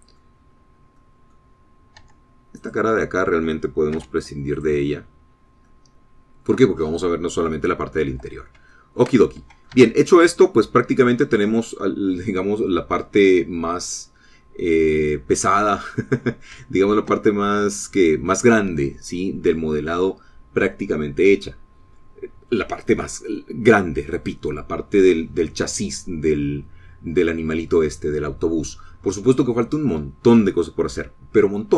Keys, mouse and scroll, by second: 1.8-2.2 scroll up 1, 2.2 middle click, 2.8 scroll down 1, 3.0 middle click, 3.4 Tab, 3.9 click, 5.2 x, 5.9 click, 6.6 scroll down 2, 6.9-8.6 middle drag, 9.3-9.7 scroll up 2, 9.7 scroll down 3, 10.0 shift+middle click, 10.9 click, 11.1 Tab, 11.5 scroll down 1, 11.7-14.1 drag, 17.0-17.3 scroll down 1, 17.5-17.8 scroll up 1, 18.0 shift+click, 18.9 click.